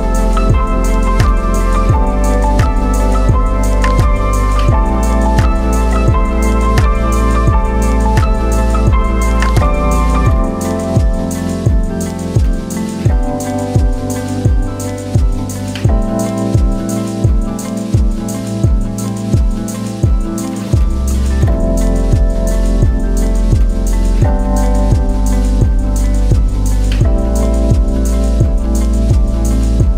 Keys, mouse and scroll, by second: 6.4 click, 7.1 scroll down 1, 7.9 scroll up 1, 10.8 click, 15.4 click, 17.2-17.9 typing, 18.7 click, 19.1 scroll up 1, 20.1 click, 24.7-26.5 drag, 27.5 ctrl+click.